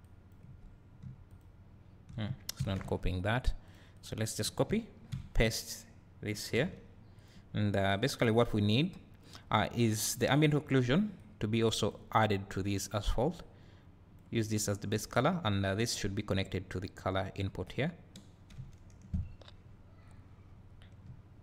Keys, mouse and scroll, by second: 1.3 shift+click, 4.0 click, 5.1 ctrl+v, 8.8 click, 9.8 click, 11.2-21.4 drag, 18.5 `, 19.3-19.6 scroll up 2, 21.1 `.